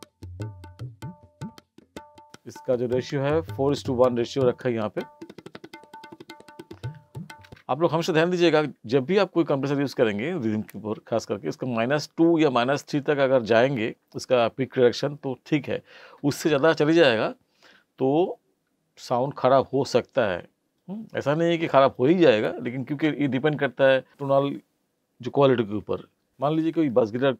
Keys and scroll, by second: 7.4 space.